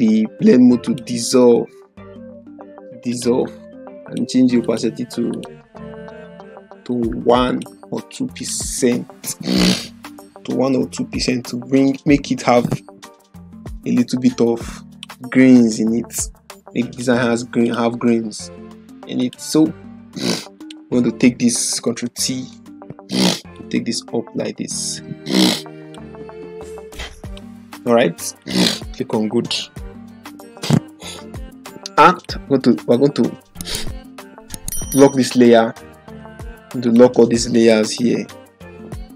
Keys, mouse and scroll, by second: 3.3 click, 9.3 BackSpace, 9.7 2, 12.8 BackSpace, 13.0 1, 14.9 click, 17.6 click, 22.0 ctrl+t, 23.5-26.0 drag, 32.1 click.